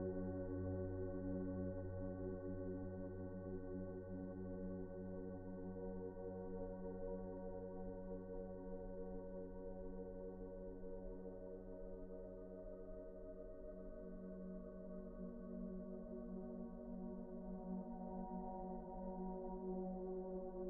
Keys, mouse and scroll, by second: 0.6 alt+shift+click, 1.1 ctrl+z, 3.2 alt+shift+click, 3.7 middle click, 4.1 alt+z, 4.3 scroll down 1, 4.5 middle click, 5.0-5.5 scroll up 1, 6.1 middle click, 6.9 typing, 8.1 middle click, 8.6 ctrl+z, 8.9 ctrl+z, 9.2 middle click, 14.9 scroll up 1, 15.1 shift+middle click, 15.4 scroll up 1, 15.7 shift+middle click, 16.5 scroll up 1, 16.8 scroll down 1, 17.3 shift+middle click, 17.7-18.0 scroll up 1, 18.0-18.6 scroll down 1, 19.2 middle click.